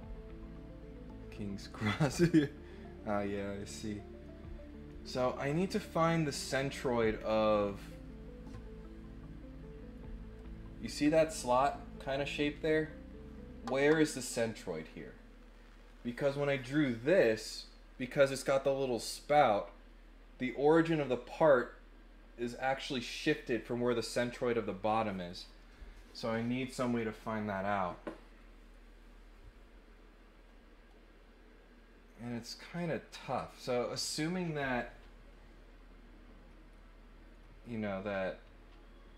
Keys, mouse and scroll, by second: 7.2 scroll down 4, 7.6 scroll up 2.